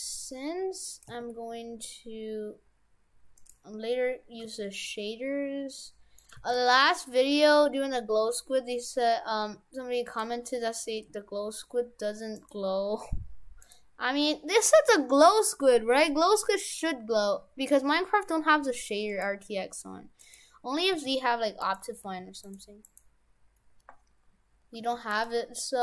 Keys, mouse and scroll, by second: 0.5 g, 1.1 s, 4.5 g, 6.3 g, 12.4 right click, 13.7 right click, 14.7 g, 20.3 right click, 20.9 a, 21.7 right click, 22.1 a, 22.5 right click, 22.9 right click, 24.7 g.